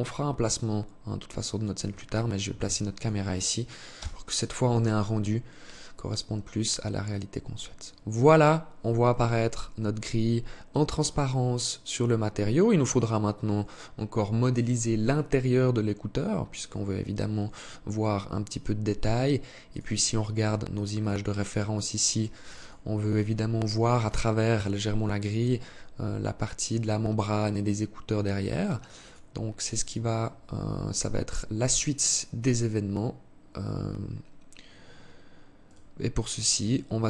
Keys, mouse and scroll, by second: 1.6 ctrl+s, 31.2 click, 34.1 scroll up 3, 34.7 right click, 36.1 KP_3.